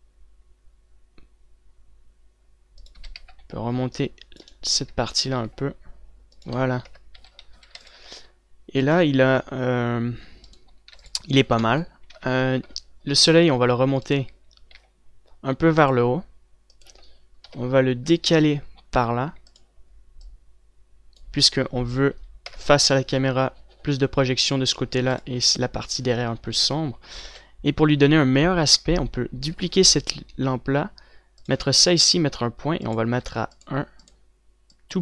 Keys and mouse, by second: 3.5-6.0 drag, 3.7 a, 3.7 c, 6.0 r, 7.5 KP_0, 7.8 z, 8.0 a, 8.3 ctrl+s, 9.0 middle click, 9.2-12.7 drag, 10.6 g, 11.3 ctrl+s, 12.7 KP_3, 13.2 middle click, 15.2 r, 18.0 KP_7, 19.0 r, 23.2 KP_0, 25.7 ctrl+s, 27.0 ctrl+s, 28.4 KP_7, 30.3 shift+d.